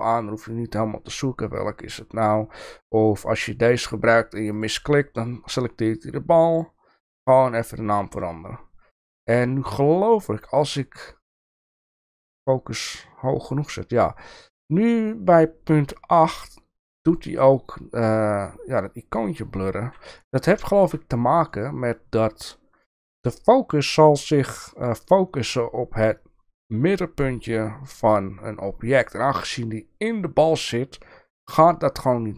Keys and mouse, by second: 6.7 click, 9.7-15.1 drag, 20.3 shift+middle click, 21.5 middle click, 22.9 shift+middle click, 25.0-25.5 middle drag.